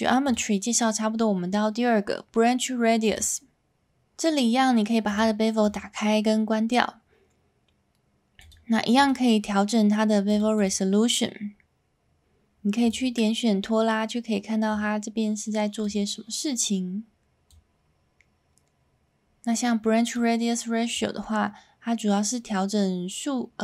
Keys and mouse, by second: 0.3-3.1 drag, 5.1 click, 5.7 click, 9.1-10.7 drag, 13.1-15.8 drag, 17.6-20.1 drag, 20.9-23.6 drag.